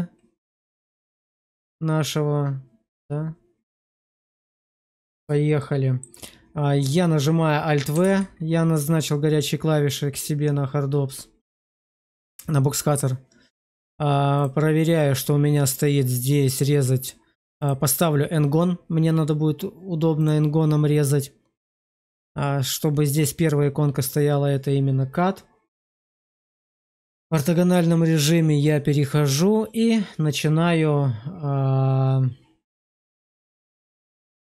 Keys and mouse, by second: 5.5 shift+middle click, 7.9 alt+w, 14.4-18.9 drag, 20.2-24.5 drag, 26.1-26.9 shift+middle drag, 27.2 shift+middle click, 32.8 drag.